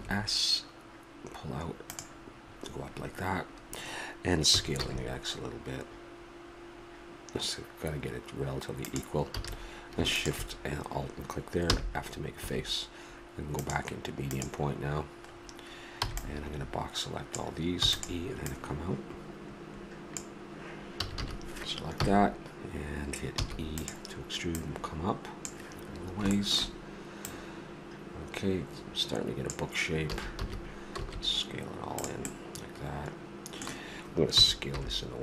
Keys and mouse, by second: 4.5 s, 9.3 a, 10.1-11.7 drag, 11.7 f, 12.4 a, 13.6-15.3 drag, 16.0 b, 18.4-20.1 drag, 20.9 a, 21.2 a, 22.0 KP_1, 23.4 e, 24.5-26.3 drag, 26.3 middle click, 27.3-29.5 drag, 30.1 a, 30.4 a, 30.9 s, 32.3-34.3 middle drag, 34.3 s.